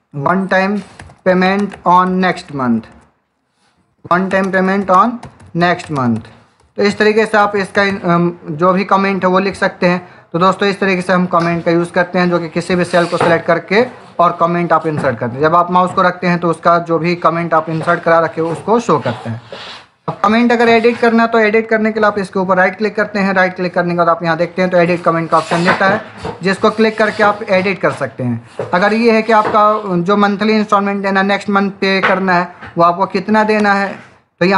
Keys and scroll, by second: 0.0-2.2 typing, 3.6-8.3 typing, 33.6 space.